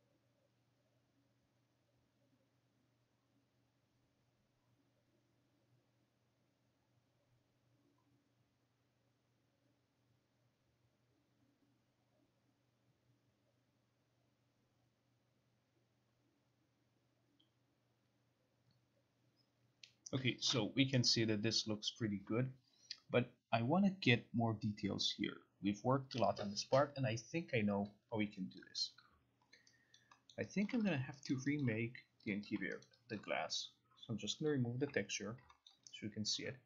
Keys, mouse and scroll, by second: 28.7 click, 29.2 click, 30.1 alt+right click, 30.4 alt+middle click, 30.8 alt+right click, 31.0 click, 31.5 alt+right click, 31.8 alt+click, 32.4 click, 33.0 alt+right click, 34.6 click, 34.9 Delete, 35.8 alt+scroll, 36.4 alt+click.